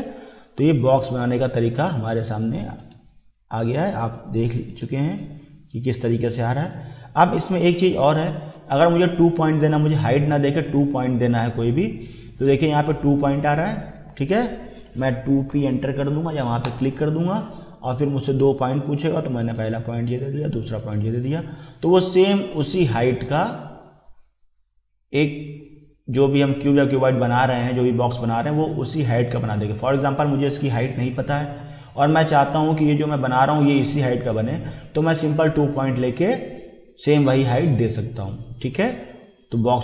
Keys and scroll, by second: 14.9 2, 15.5 p, 16.7 Return.